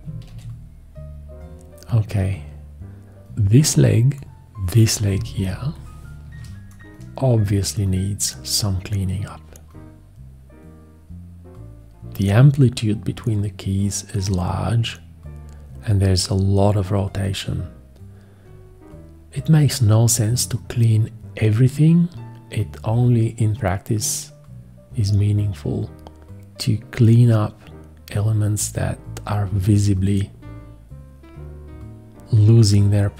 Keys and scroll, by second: 0.3 shift+x, 5.1 ctrl+space, 5.5 ctrl+space.